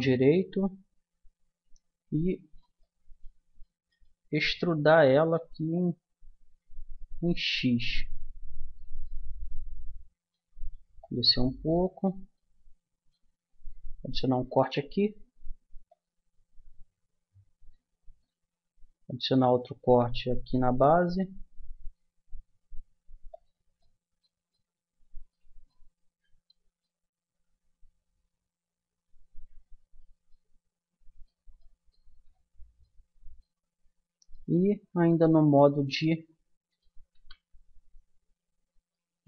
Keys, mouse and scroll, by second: 2.8 middle click, 5.7 middle click, 9.0-11.0 middle drag, 11.0-14.4 drag, 14.4 ctrl+r, 19.4 ctrl+r, 23.8-27.4 middle drag, 29.8-32.8 middle drag, 33.2 middle click, 34.5-37.1 middle drag, 37.1 a, 38.8-39.2 drag.